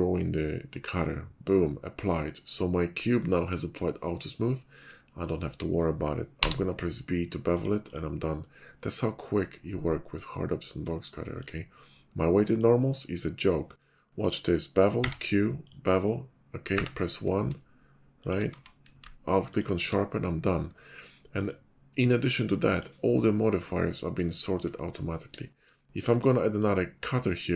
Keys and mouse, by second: 8.4-10.9 middle drag, 14.9 q, 15.7 click, 18.4 q, 19.5 alt+click, 21.4 middle click, 22.4 middle click, 24.1-24.7 shift+middle drag, 25.7 shift+middle drag.